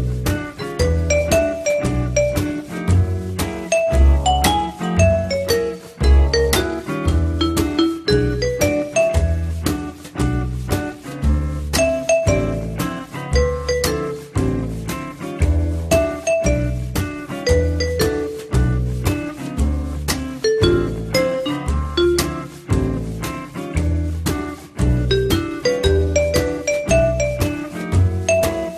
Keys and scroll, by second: 1.1 F3, 7.0 f, 14.0-14.9 typing, 21.9 4, 25.5 Delete, 26.8 3.